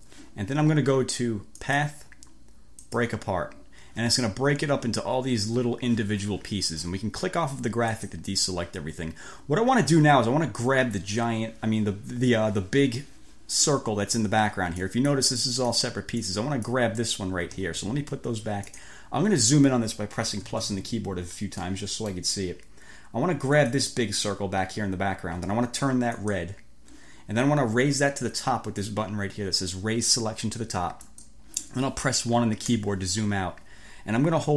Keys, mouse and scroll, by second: 1.6 click, 2.9 click, 7.9 click, 15.0 click, 15.6 click, 16.4 click, 17.5 ctrl+z, 18.8-19.1 scroll up 2, 20.5 =, 21.8 scroll up 2, 21.8 click, 23.6 click, 26.2 click, 31.1 click, 32.8 1.